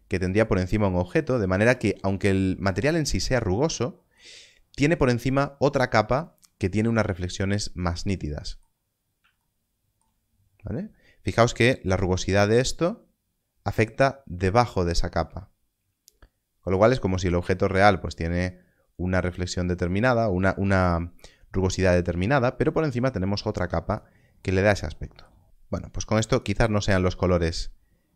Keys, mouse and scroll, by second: 8.8 click, 8.9 scroll up 1, 12.5 click, 26.3 click.